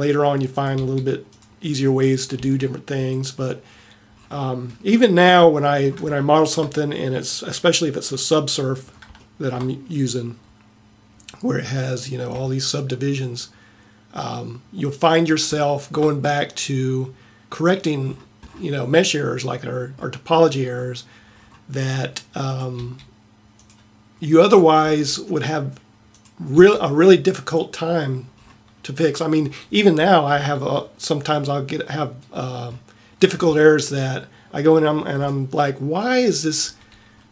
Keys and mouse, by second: 0.9 g, 2.4 g, 14.5-19.2 middle drag, 20.8 middle click, 21.7 middle click, 22.8 g, 25.1 g, 26.6 g, 28.0 middle click, 28.7-29.7 middle drag.